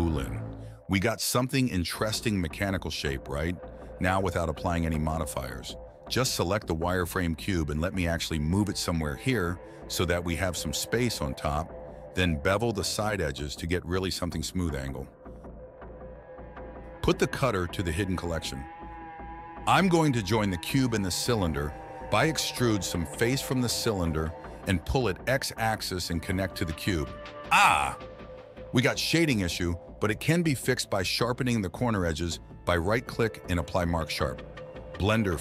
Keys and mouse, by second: 1.1 click, 1.8 Tab, 3.2 click, 4.3 click, 4.9 g, 10.4 click, 12.1 shift+middle click, 12.9 ctrl+b, 15.6 ctrl+b, 17.6 Tab, 18.1 m, 20.2 middle click, 20.7 KP_1, 21.4 middle click, 23.5 click, 24.0 ctrl+click, 24.9 ctrl+click, 25.9 e, 27.9 s, 30.5 i, 31.7 click, 32.1 shift+click, 33.4 click, 34.0 shift+click, 35.2 Tab.